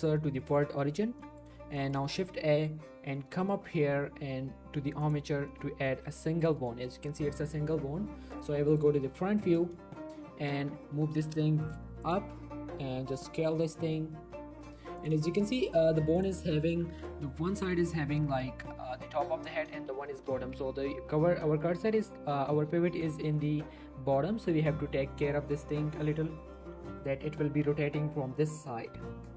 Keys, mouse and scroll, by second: 1.2 middle click, 1.8 shift+middle click, 2.1 shift+a, 5.5 middle click, 5.9 g, 6.6 right click, 6.8 g, 7.3 right click, 11.0 typing, 12.0 click, 12.2 z, 12.4 scroll up 1, 13.1 s, 15.0 s, 15.1 click, 15.2 shift+middle click, 15.6 Tab, 16.2 click, 16.4 g, 16.6 right click, 16.9 Tab, 17.3 r, 17.7 right click, 20.2 r, 20.5 right click, 21.2 r, 21.5 right click, 23.0 g, 23.2 right click, 24.2 r, 24.5 right click, 24.9 r, 25.2 right click, 25.5 scroll down 1, 26.0 scroll up 1, 26.5 scroll down 1, 27.1 scroll up 1, 27.7 g, 28.3 right click.